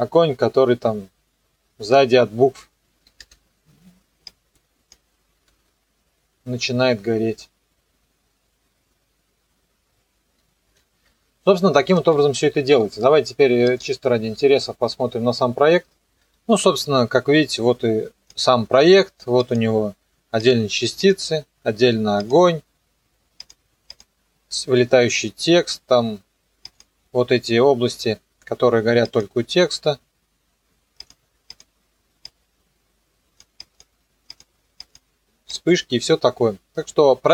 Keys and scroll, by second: 3.2 space, 5.5 KP_0, 10.6 space, 12.0 ctrl+s.